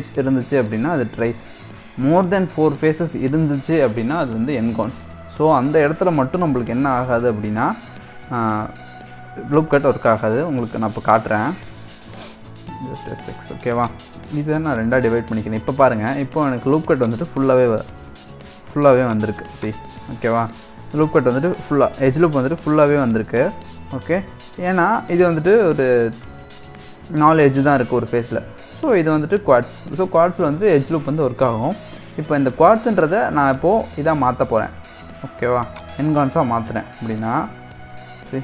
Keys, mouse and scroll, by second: 6.2-6.7 scroll down 2, 6.7-8.6 middle drag, 8.6 a, 9.7 s, 12.5 s, 16.0 ctrl+r, 19.6 click, 19.9-22.9 middle drag, 23.0-26.0 middle drag, 34.0 middle click, 34.7 2, 35.7 click, 36.2-38.4 middle drag.